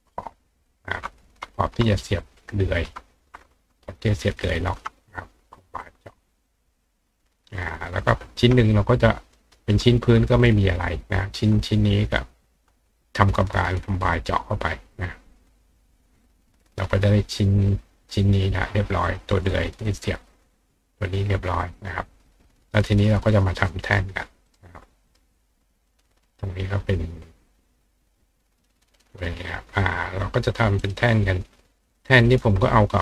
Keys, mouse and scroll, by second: 0.7 shift+click, 2.4 shift+click, 3.8 shift+click, 4.4 shift+click, 5.8 click, 6.4 click, 7.0 click, 8.3-9.6 ctrl+drag, 9.4 ctrl+right click, 11.6 click, 12.7-13.8 drag, 15.4 click, 17.3 click, 19.1 click, 20.2 click, 21.1 click, 24.1 click, 24.5 right click, 25.1 right click, 26.6 click, 27.5 click, 29.0 click, 29.5 click, 30.5 click, 30.8 right click, 32.0 click.